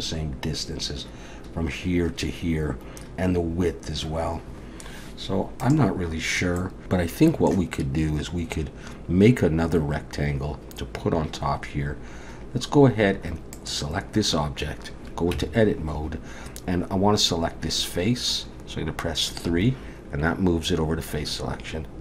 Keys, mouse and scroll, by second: 6.6 middle click, 7.2 middle click, 13.5 click, 15.3 Tab, 19.5 3.